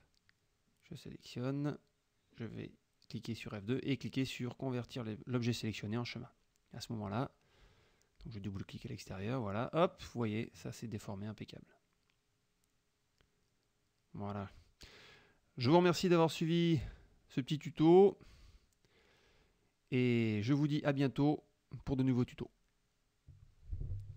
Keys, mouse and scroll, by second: 0.2 click, 0.9 click, 3.5 click, 5.2 click, 6.1 click, 6.7 F1, 6.9 click, 7.3 click, 8.3-8.8 drag, 8.9 click, 10.1 click, 11.1 click, 12.5 click, 12.9 click, 13.6 KP_Subtract, 14.6 middle click, 15.1 click, 15.6 click, 23.6 click, 24.1 click.